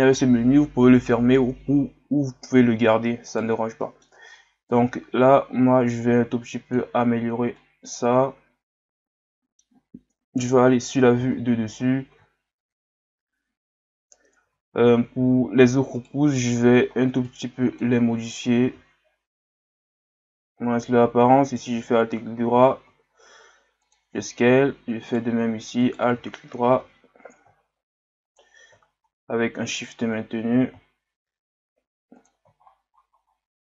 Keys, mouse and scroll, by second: 2.4-2.7 scroll up 1, 3.3 right click, 3.8 middle click, 4.7-7.2 drag, 7.2-7.6 scroll down 2, 7.6-10.4 middle drag, 10.4 KP_7, 11.2-12.9 scroll up 10, 12.9-14.4 scroll up 1, 14.4 z, 14.9-15.9 scroll up 1, 15.9 scroll up 1, 15.9 right click, 16.3 c, 21.5 alt+right click, 22.3 s, 25.0 alt+right click, 25.8 alt+right click, 26.8 s, 28.8-29.2 scroll down 1, 29.7 alt+right click, 32.6-33.2 scroll up 11.